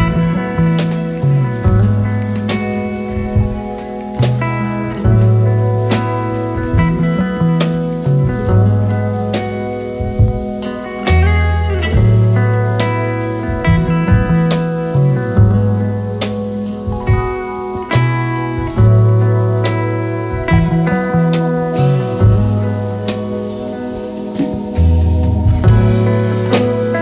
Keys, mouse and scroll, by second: 0.9 scroll down 6, 1.2-8.3 drag, 8.3-9.1 scroll down 10, 9.1 click, 10.4-12.5 scroll up 3, 12.5 Tab, 13.1-15.1 scroll up 11, 15.1-16.6 scroll up 6, 16.6-17.4 scroll down 1, 17.4-19.3 scroll down 1, 19.3-20.1 scroll down 1, 22.8-23.2 scroll up 4, 23.7-25.5 scroll up 4, 25.5-27.0 drag.